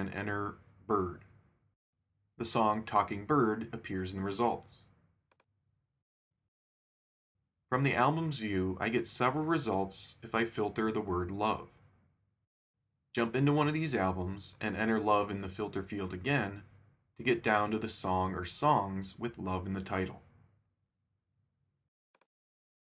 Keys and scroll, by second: 0.0-1.2 typing, 8.1 shift+super+f, 9.1-10.4 typing, 16.8 shift+super+f, 17.5-18.6 typing.